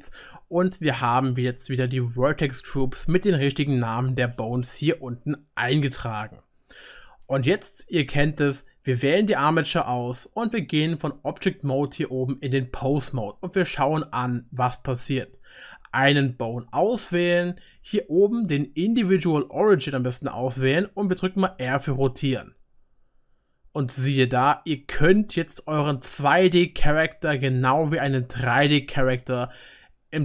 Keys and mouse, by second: 2.9-7.1 right drag, 8.9 click, 10.2 right click, 11.1-15.2 middle drag, 12.4 click, 12.4 right click, 15.2-18.9 right drag, 20.6-25.0 drag, 20.6-29.0 middle drag, 20.6-25.0 right drag, 21.5 r, 29.4-30.2 drag, 29.4-30.2 middle drag, 29.4-30.2 right drag.